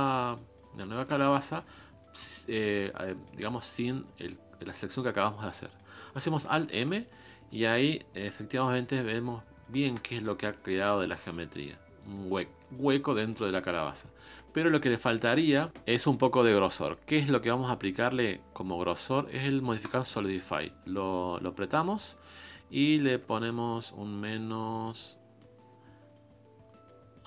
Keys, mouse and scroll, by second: 1.7 scroll up 2, 2.0 middle click, 2.8 scroll down 3, 3.1 middle click, 3.4 scroll up 1, 3.7 middle click, 4.5 scroll down 3, 4.7 middle click, 5.1-5.6 scroll up 2, 5.6 middle click, 6.1 scroll up 1, 6.2 scroll down 2, 6.7 alt+m, 6.9 middle click, 7.4 scroll down 4, 7.6 scroll up 1, 7.7-9.1 middle drag, 9.1-9.6 scroll up 3, 9.6-11.2 middle drag, 11.2 ctrl+Tab, 11.5-13.4 middle drag, 13.4 ctrl+space, 14.2-17.1 shift+middle drag, 24.7-26.9 drag, 27.0-27.2 middle drag.